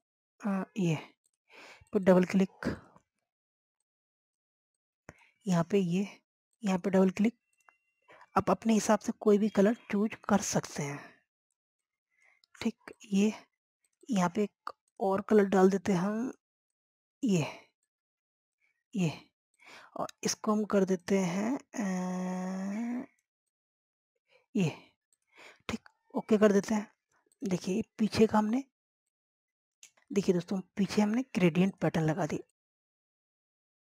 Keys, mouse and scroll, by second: 26.1 scroll down 1, 26.5 click, 26.9 typing, 27.4 scroll down 1, 28.2-29.5 drag, 30.0 scroll down 1, 30.4 scroll up 1, 30.8 click, 31.3 scroll down 1, 31.7 click, 33.7 scroll up 1.